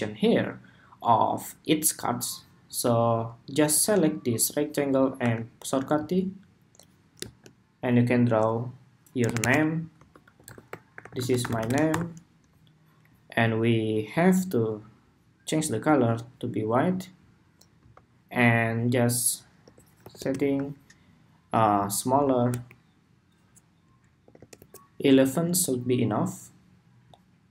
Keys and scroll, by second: 12.1 Escape.